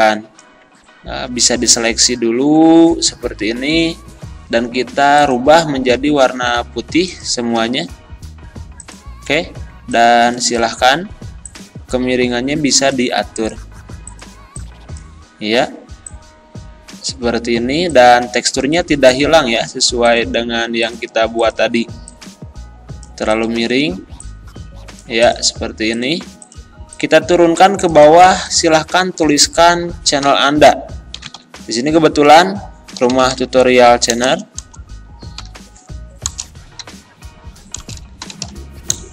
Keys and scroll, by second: 28.9 ctrl+a, 30.1-31.4 typing, 33.0-34.3 typing, 35.4 u, 36.3 BackSpace, 36.8 u, 37.8-39.1 typing.